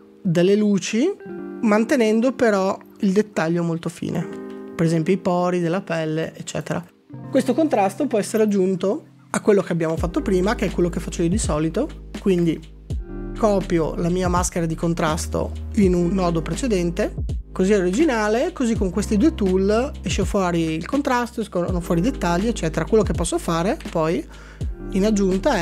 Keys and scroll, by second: 1.3 f, 4.5 ctrl+d, 4.9 ctrl+d, 9.7 s, 17.2-18.1 typing, 23.9 alt+s.